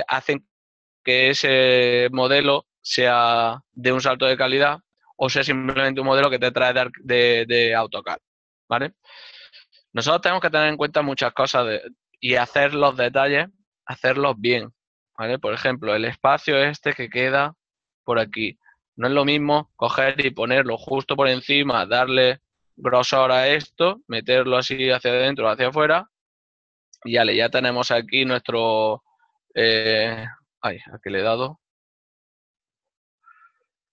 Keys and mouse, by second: 21.1 shift+middle click, 25.0 right click, 28.5 e, 31.1 ctrl+click, 31.5 right click, 31.8 ctrl+z, 33.7 g.